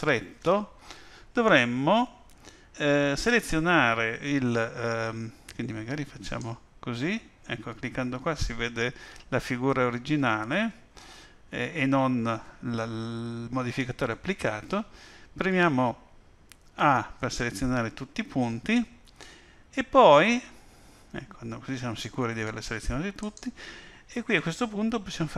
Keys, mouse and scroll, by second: 6.2 click, 16.7 a, 23.2 click.